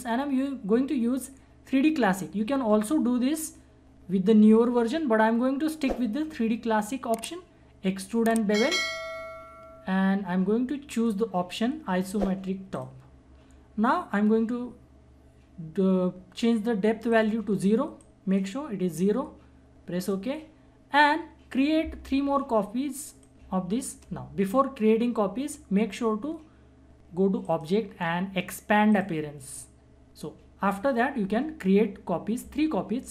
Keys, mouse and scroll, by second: 8.6 click, 8.9 click, 11.0 click, 17.1-20.0 drag, 23.2-26.9 drag, 27.4 click.